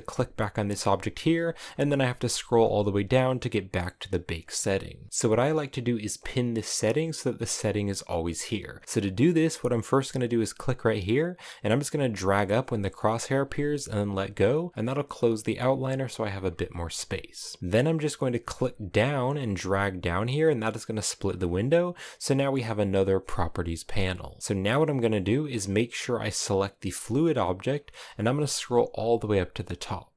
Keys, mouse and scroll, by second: 12.4-13.9 drag, 21.1-30.1 drag.